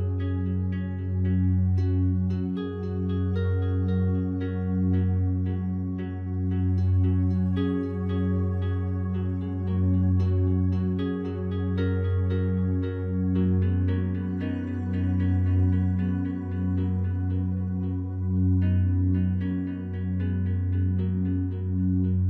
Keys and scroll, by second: 6.8 ctrl+z, 16.1 ctrl+z.